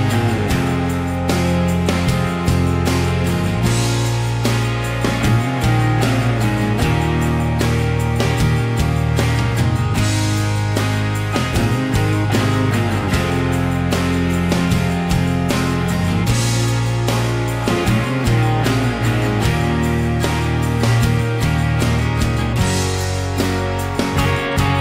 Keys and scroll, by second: 0.0-1.2 typing, 2.5 Escape, 5.7 m, 8.1 Escape, 9.5 ctrl+a, 10.5 ctrl+h, 14.1 i, 14.3 Escape, 18.2 2, 18.4 Return, 19.9 Escape.